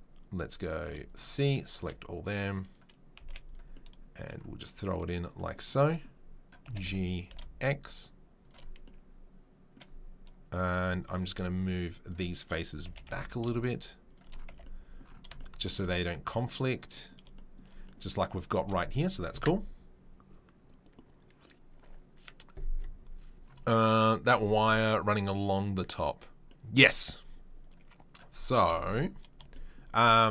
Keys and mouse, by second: 0.8 c, 1.7 e, 3.1 z, 6.6 g, 10.5 click, 10.7-30.3 shift+middle drag, 10.8-12.4 shift+drag, 12.8 g, 14.5 Tab, 27.6 click, 28.6 KP_7.